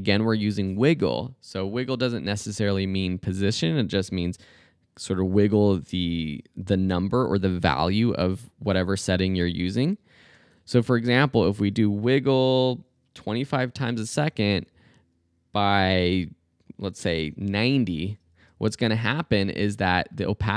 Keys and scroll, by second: 0.0-1.6 typing, 10.2 shift+9, 13.0-14.2 typing, 17.2-18.2 typing.